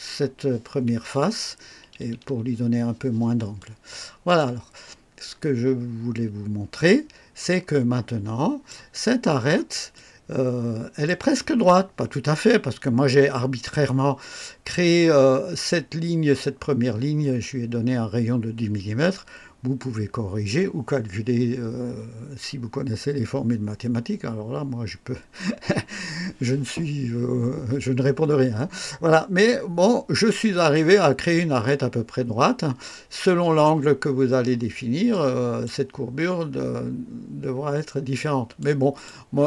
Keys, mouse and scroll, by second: 3.5-4.5 drag, 4.7 scroll down 1, 6.8-8.8 drag, 9.1 scroll up 1, 9.9-11.2 drag, 30.4-33.8 drag, 35.1 click, 38.5-39.2 drag.